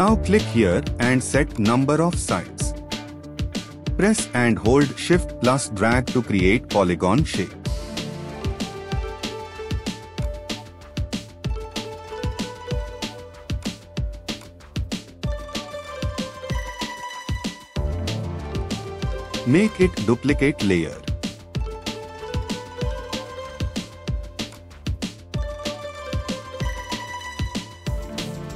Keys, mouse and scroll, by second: 4.0 shift+click.